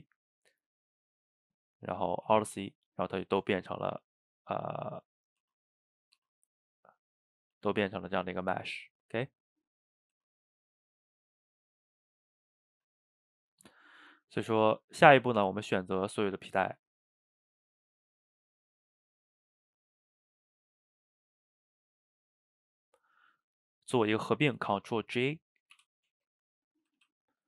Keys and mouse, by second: 0.3-1.9 middle drag, 1.9 click, 2.3 alt+c, 3.5-3.9 middle drag, 3.9 Tab, 4.8-5.4 middle drag, 5.4 Tab, 6.0 click, 6.2 Tab, 6.9 Tab, 7.4 click, 7.5 Tab, 8.1-8.6 middle drag, 8.6 Tab, 10.2 Tab, 10.8 click, 11.1 Tab, 11.6 Tab, 12.3 click, 12.8 Tab, 13.5 Tab, 14.7 shift+drag, 15.2 shift+click, 15.6-17.0 middle drag, 17.0 shift+click, 18.8 shift+click, 20.1 middle click, 20.8 shift+drag, 21.1-22.3 middle drag, 22.3 shift+click, 22.5-25.7 middle drag, 25.7 ctrl+j, 26.9 a, 27.0 a.